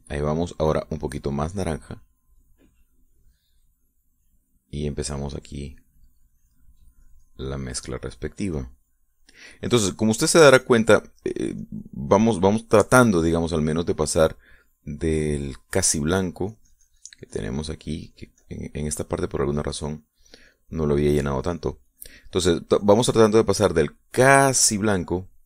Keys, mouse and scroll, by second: 2.2-4.0 drag, 5.2 middle click, 6.2-11.3 drag, 11.4-13.8 drag, 15.0 click, 16.2 click, 17.3 click, 17.6-24.7 drag.